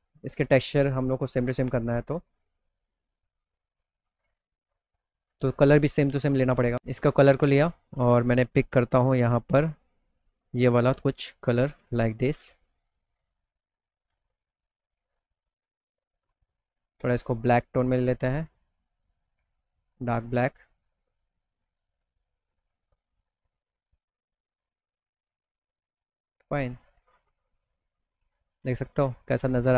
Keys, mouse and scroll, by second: 1.7 click, 2.9 click, 7.9 click, 8.4 scroll up 1, 9.2-9.6 scroll up 1, 9.9 click, 11.0 click, 11.7 scroll up 1, 12.3 middle click, 13.1-13.4 scroll down 1, 13.4 middle click, 13.9 middle click, 14.2 middle click, 14.6 middle click, 16.6 click, 18.0 click, 21.6 click, 22.9 click, 24.4-25.3 scroll down 2, 25.3 click, 25.9 middle click, 26.1 middle click, 26.4 middle click, 26.7 alt+middle click, 27.7 middle click, 28.1 middle click.